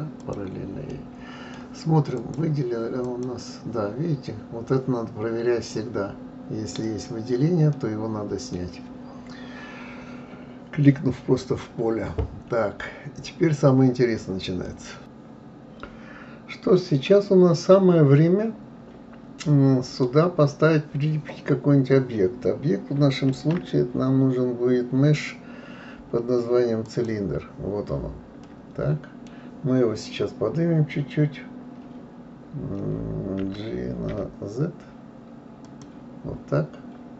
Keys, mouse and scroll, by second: 0.2 click, 0.9-2.1 middle drag, 2.1-5.2 drag, 6.8 click, 7.7-10.7 middle drag, 14.6-15.0 middle drag, 19.4-22.4 middle drag, 23.3 shift+a, 28.4-31.4 middle drag, 33.4 g.